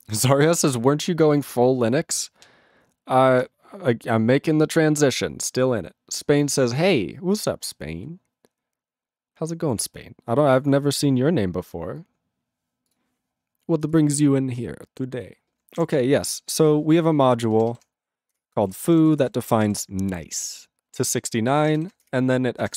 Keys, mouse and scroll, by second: 16.9 click, 18.3 ctrl+Return, 18.6 ctrl+a, 18.7 ctrl+p, 18.8 ctrl+p, 19.1 ctrl+space, 19.1 ctrl+e, 19.2 ctrl+n, 19.5 ctrl+e, 19.6 ctrl+g, 21.1 ctrl+b, 22.1 ctrl+Return.